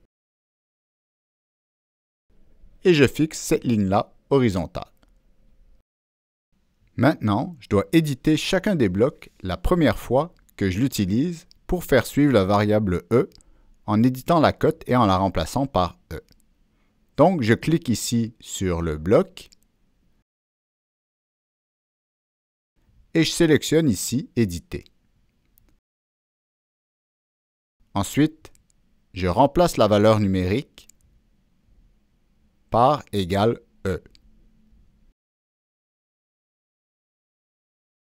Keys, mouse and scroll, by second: 0.4 click, 1.3 click, 2.3 click, 3.3 click, 4.8 click, 8.0 click, 16.1 click, 18.8 click, 21.3-21.9 drag, 24.2 click, 24.3 click, 25.6 click, 27.3 Down, 28.5 Return, 30.9 click, 31.9 Return, 31.9 click, 33.5-34.3 drag, 34.9 Escape, 36.7 click.